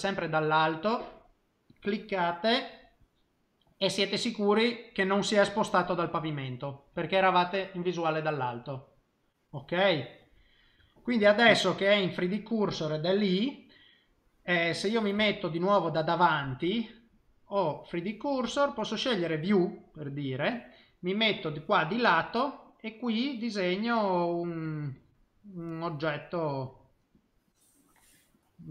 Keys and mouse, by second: 1.8 click, 3.5 middle click, 4.0 middle click, 4.5 middle click, 10.1 middle click, 11.8 middle click, 15.1 KP_1, 18.6 click, 21.4 click, 23.2 click, 23.6 click, 24.6 click, 25.0 click, 25.8 click, 26.1 click, 26.5 click, 26.6 click, 27.1 click.